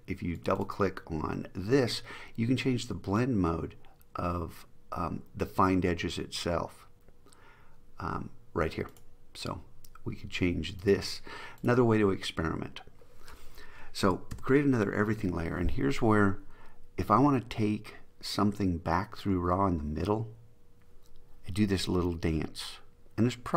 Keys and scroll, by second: 14.5 alt+shift+super+e.